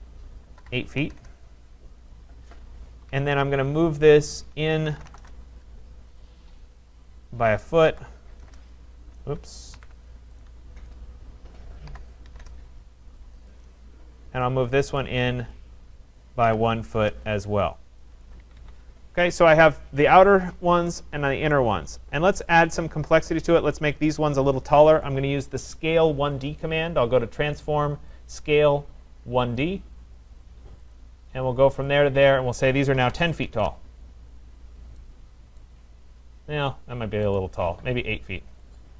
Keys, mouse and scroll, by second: 0.6-1.1 typing, 2.1 click, 2.3 Return, 3.0 Escape, 3.1 Escape, 3.1 typing, 3.3 Escape, 3.8 click, 4.6-5.6 typing, 6.2 click, 7.7-8.4 typing, 10.2 ctrl+z, 10.4 right click, 10.9 click, 11.9-12.3 typing, 12.4 Return, 13.5 click, 14.4 click, 15.0 right click, 16.5 typing, 16.9 Return, 18.0 click, 18.4 Escape, 18.6 Escape, 19.8 click, 20.7 click, 21.4 click, 21.9 click, 22.8 click, 23.8 click, 26.5 click, 29.6 click, 30.9 click, 32.0 click, 32.7-34.0 typing, 34.4 scroll down 3, 35.6 right click, 35.9-37.0 scroll down 3, 37.0 scroll, 37.0 typing, 37.4 right click, 38.7 click.